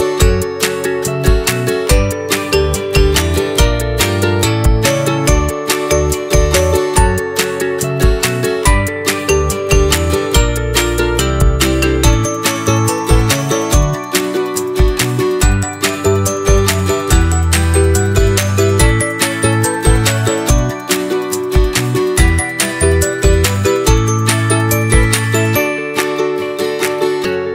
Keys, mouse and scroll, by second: 0.8-2.8 drag, 2.8-4.2 right drag, 4.2 click, 4.9 click, 5.0 click, 6.0-7.2 drag, 7.2-7.6 scroll up 2, 7.6 middle click, 8.4 scroll up 2, 8.7 middle click, 9.2-9.6 scroll up 1, 9.6-11.6 shift+middle drag, 13.3 click, 14.6 shift+click, 16.3 s, 18.4-18.8 scroll up 2, 18.8-19.8 shift+middle drag, 19.8 click, 21.0 click, 21.4 click, 21.9 shift+click, 22.4 s, 23.8-24.8 middle drag, 24.8-26.8 drag, 27.1 s.